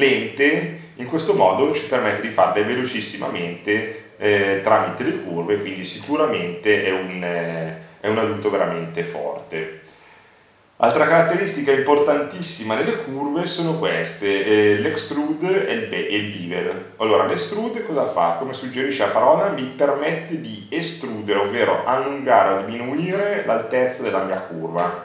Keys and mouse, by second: 4.0 s, 5.3 click, 5.4 click, 6.0 click, 9.5-11.0 middle drag, 11.0-15.7 drag, 16.9-20.0 drag, 22.7 click.